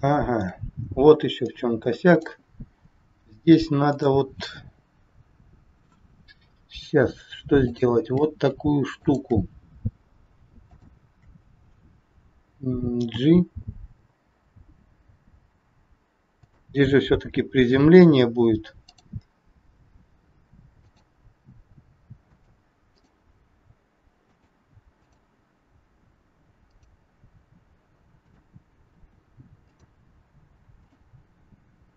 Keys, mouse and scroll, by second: 0.1 shift+middle click, 1.5 click, 2.8 scroll up 2, 3.8 click, 6.5-6.8 scroll up 2, 7.6 shift+click, 8.9 shift+click, 9.7 scroll down 2, 10.7 shift+click, 11.6 scroll down 1, 13.0 g, 18.8 click, 19.4 r, 21.3 r, 23.0 click, 23.4 r, 25.0 click, 25.7 r, 28.2 click, 29.0 r, 30.7 click, 31.3 r.